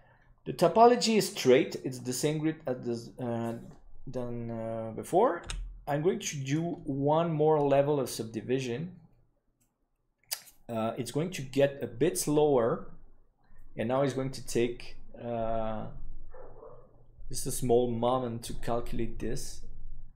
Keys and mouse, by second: 1.2 middle click, 5.4 w.